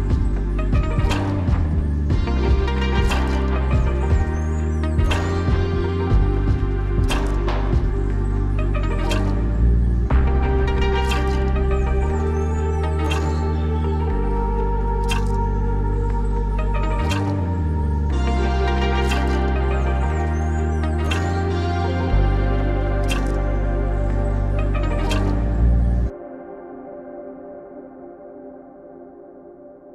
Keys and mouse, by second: 0.3 click, 2.4 click, 2.5 click, 3.6 click, 3.8 g, 6.5 click, 8.1 click, 8.7 g, 9.6 click, 9.7 g, 13.6 click, 13.7-17.7 drag, 19.7-21.1 middle drag, 24.5 shift+middle drag, 25.4 shift+click, 26.2-26.6 middle drag, 27.1 Tab, 28.1 shift+a, 29.8-29.9 drag.